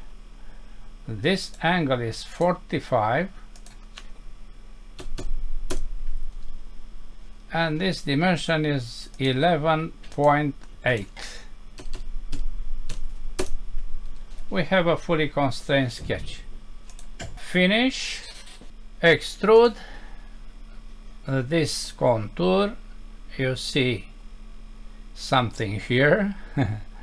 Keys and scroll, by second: 5.7 Return, 13.4 Return.